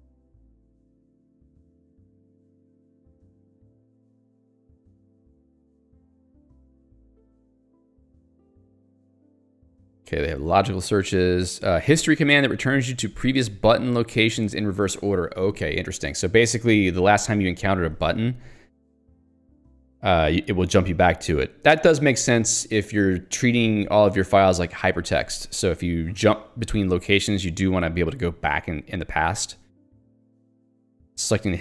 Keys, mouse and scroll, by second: 0.1 ctrl+d, 0.9 ctrl+u, 3.0 ctrl+d, 5.9 j, 6.7 ctrl+d, 11.9 k, 13.5 j, 14.0 l, 30.5 click, 31.4 click.